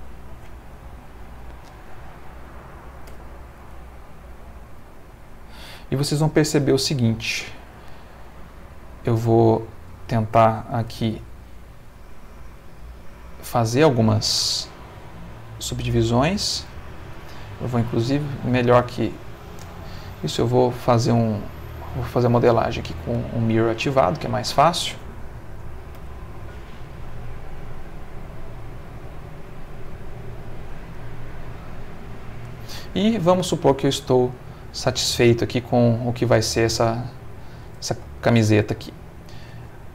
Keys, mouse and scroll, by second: 0.1 click, 0.7 0, 1.0 click, 1.7 click, 3.1 g, 3.6 z, 5.1 click, 6.6 ctrl+r, 7.0 ctrl+click, 9.4 click, 10.7 ctrl+r, 11.4 scroll up 2, 12.1 click, 13.0 click, 14.8 click, 17.6 click, 18.7 x, 19.1 click, 20.4 click, 20.9 click, 22.4 click, 23.7-24.8 drag, 25.9 e, 27.7 click, 28.2 e, 28.9 click, 29.2 e, 30.5 click, 30.8 e, 32.2 click, 33.3 middle click, 34.2 middle click, 34.7-36.5 middle drag, 37.2 click, 38.9 ctrl+middle click.